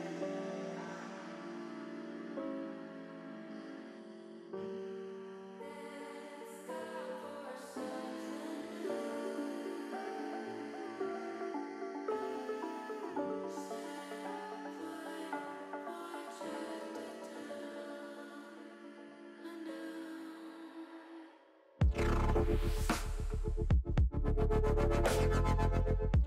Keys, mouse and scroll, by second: 1.7 click, 2.8 click, 3.5 click, 4.3 alt+shift+click, 5.3 click, 7.0 click, 8.3 middle click, 9.5 middle click, 11.6 shift+click, 12.3-13.8 drag, 14.0 middle click, 16.1 shift+middle click, 20.3 middle click, 21.6 click, 22.0 middle click, 22.9 click, 23.3 middle click, 23.9-25.1 drag, 25.6 middle click.